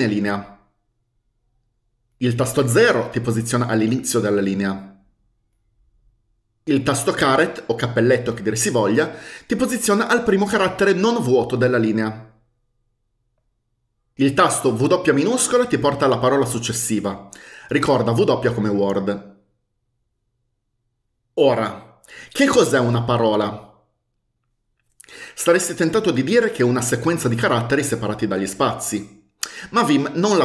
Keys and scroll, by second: 2.9 0, 7.4 ^, 15.4 w.